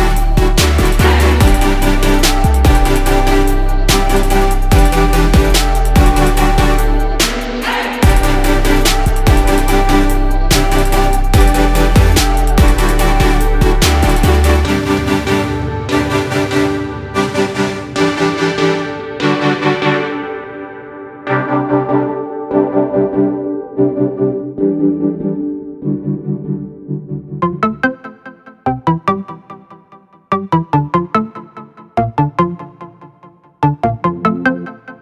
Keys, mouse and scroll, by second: 0.5 click, 5.8 click, 15.4 ctrl+g, 16.0 click, 17.6 shift+click, 19.0 click, 23.4 ctrl+scroll, 24.4-26.6 drag, 32.1 ctrl+d, 32.8-34.3 drag.